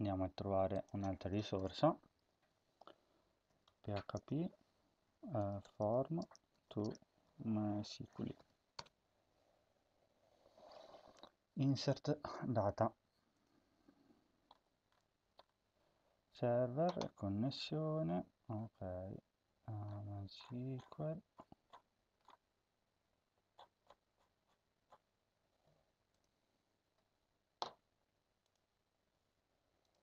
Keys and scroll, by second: 3.1-8.7 typing.